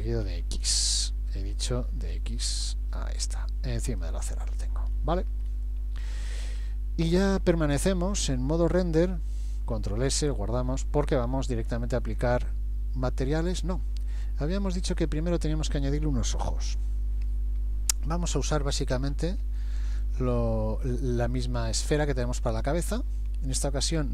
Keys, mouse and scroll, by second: 0.3 g, 2.1 g, 4.9-5.8 scroll up 5, 6.1 shift+middle click, 6.7 middle click, 9.8 ctrl+s, 14.1 click, 18.9 KP_1, 19.4 KP_3, 20.9-21.8 scroll up 2, 21.4 shift+middle click, 22.0-22.6 scroll up 3, 22.9 shift+middle click.